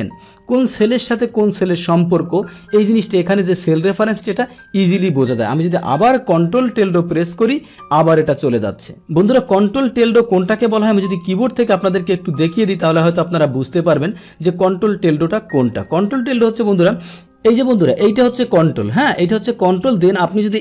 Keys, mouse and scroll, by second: 0.0 Up, 0.9 Up, 1.7 scroll down 1, 2.0 Down, 2.7 Up, 2.7 Down, 3.1 Down, 4.1 Right, 5.0 Right, 11.2 click, 13.5 click, 13.6 click, 14.4 click, 14.6 click.